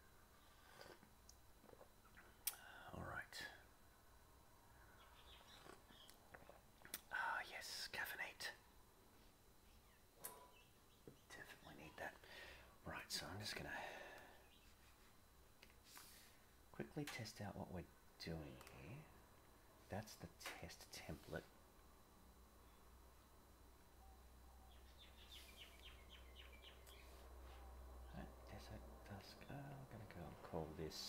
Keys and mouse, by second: 22.1-25.1 middle drag, 26.5 click, 28.5 click, 29.7-31.0 drag.